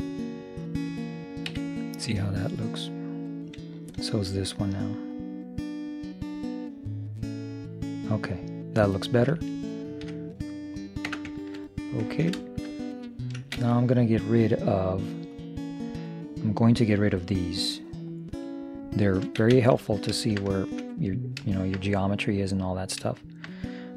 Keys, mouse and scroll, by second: 1.6 z, 2.0-4.1 middle drag, 4.1-6.0 right drag, 5.2-7.1 drag, 8.8-12.0 middle drag, 11.2 Tab, 13.6 shift+space, 15.4 right click, 16.0-17.4 drag, 17.4 middle click, 17.5 click, 19.5 shift+space, 22.8-23.9 middle drag.